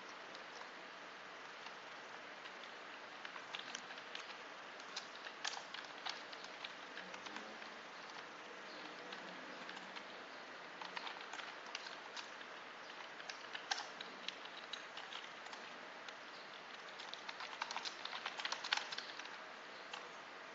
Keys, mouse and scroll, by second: 2.9-5.9 typing, 5.0 End, 6.6 shift+Down, 6.8 shift+Home, 7.2 shift+Tab, 8.4 shift+Up, 9.1 shift+Down, 10.6-12.2 typing, 12.4 Delete, 13.4 End, 13.6 BackSpace, 14.2 Up, 14.9 Down, 16.6 Up, 16.9 Return, 17.0-19.5 typing.